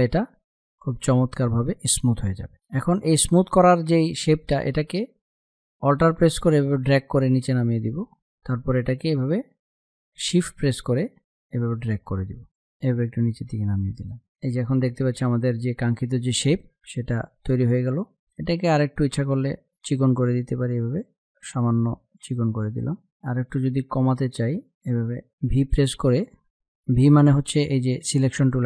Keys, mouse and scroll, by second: 4.0 space, 4.1-11.0 drag, 11.0-13.9 shift+drag, 14.1 ctrl+-, 16.7 space, 16.8-22.5 drag, 22.7 z, 22.9 click, 23.7 ctrl+z, 25.2 v.